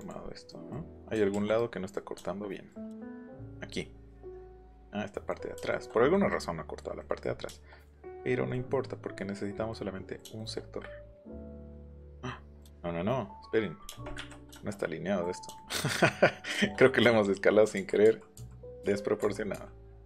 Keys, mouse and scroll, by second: 0.0 click, 1.3 ctrl+h, 1.6 middle click, 2.2 shift+middle click, 3.0 shift+middle click, 3.8 middle click, 8.2 scroll up 2, 13.9 space, 14.2 Escape, 17.7 ctrl+z, 18.0 ctrl+z, 18.3 ctrl+z, 18.8 ctrl+z, 19.2 ctrl+z, 19.5 ctrl+z.